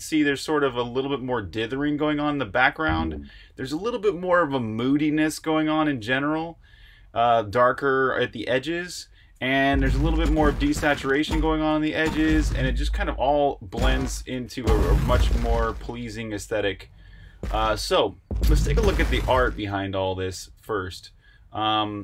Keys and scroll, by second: 2.4-4.1 typing, 5.6-6.1 typing, 7.3-8.0 typing, 19.6 super+q, 21.0 super+Tab.